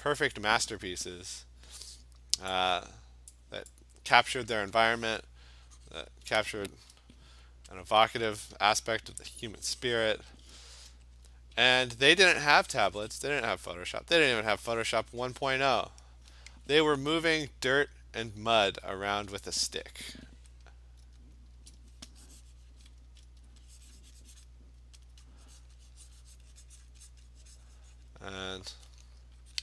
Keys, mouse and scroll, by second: 0.4 click, 3.4 click, 4.2 click, 4.7 Return, 5.9 click, 6.1 click, 7.9 alt+click, 8.0 alt+click, 8.6-9.3 ], 9.5 click, 10.3 click, 10.4 click, 11.1 alt+click, 11.2 alt+click, 12.0 alt+click, 13.2 click, 13.7 click, 14.2 alt+click, 15.6 click, 18.0 click, 19.5 click, 21.4 click, 21.5 Return, 22.1 click, 22.7 click, 22.9 click, 23.5 alt+click, 23.6 alt+click, 24.5 click, 25.1 alt+click, 25.4 click, 25.7 click, 26.2 click, 26.4 click, 26.6-28.5 alt+click, 26.7 click, 26.9 click, 27.2 click, 27.4 alt+click, 27.8 click, 28.1 click, 28.7 alt+click.